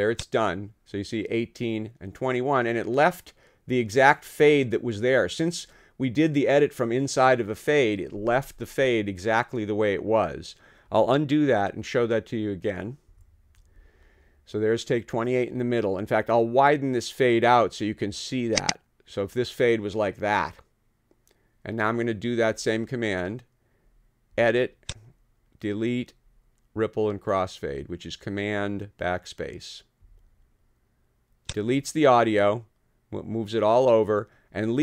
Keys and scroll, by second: 13.1 super+z.